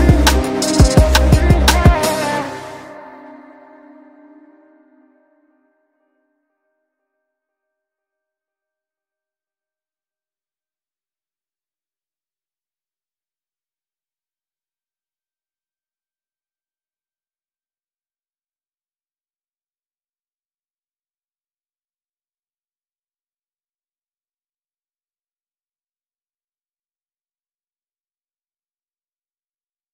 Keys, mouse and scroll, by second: 2.3 Tab, 4.0 shift+click, 4.4 typing, 4.9 click, 6.1 ctrl+x, 6.6 click, 7.6 ctrl+u, 8.0 click, 9.7 q, 10.7 click, 11.1 ctrl+v, 12.0 shift+Page_Down, 13.0 w, 13.4-17.9 drag, 18.3-18.6 scroll up 1, 18.6-20.2 drag, 20.2-20.7 scroll down 1, 20.7 click, 22.3 ctrl+click, 22.9 ctrl+right click, 23.4-25.2 drag, 26.0 e, 26.6-27.3 scroll down 1, 27.3 F2, 27.8-29.9 drag.